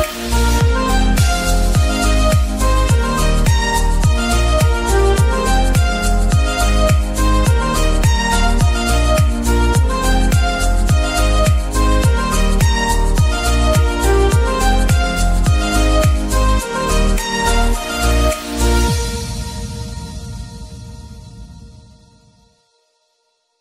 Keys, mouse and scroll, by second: 0.0 middle click, 0.9 g, 2.5 g, 3.6 g, 5.1 KP_0, 6.1 g, 8.2 click, 8.5 g, 10.6 click, 11.1 r, 13.8 g, 18.6 click, 20.7 click, 21.4-23.6 drag.